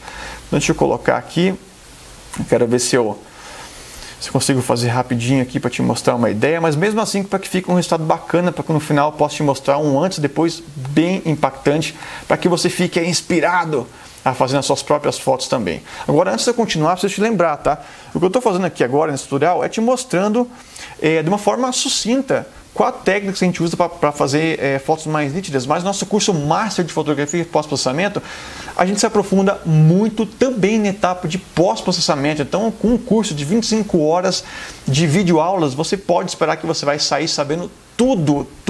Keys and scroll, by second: 6.3 space, 11.6 [, 18.6 super+-, 20.5 super+0.